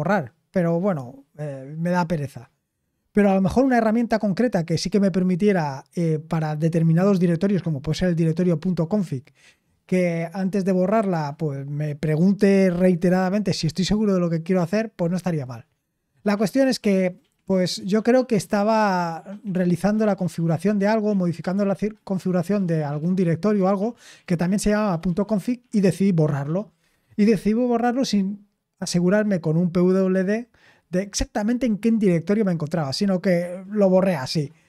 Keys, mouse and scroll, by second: 15.8-34.6 scroll down 1.